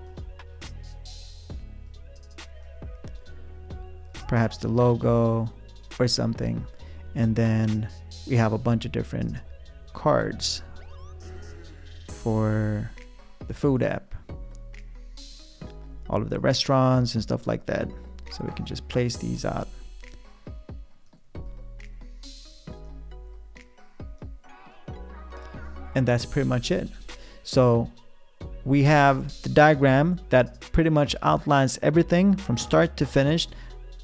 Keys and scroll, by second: 8.3 r.